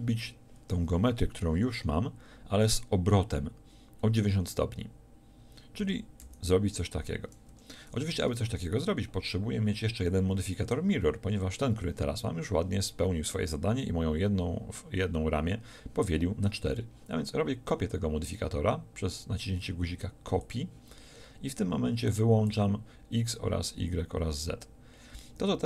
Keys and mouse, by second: 5.8-9.0 middle drag, 5.8 r, 20.4-25.6 middle drag.